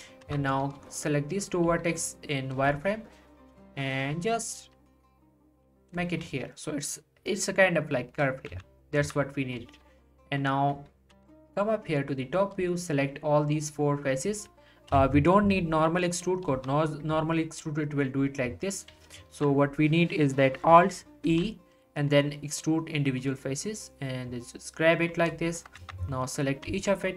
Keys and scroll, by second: 0.2 z, 1.7 g, 3.4 g, 8.5 z, 11.1 z, 14.9 1, 16.5 e, 18.9 1, 19.3 ctrl+z, 21.3 alt+e, 25.8 z, 26.7 g.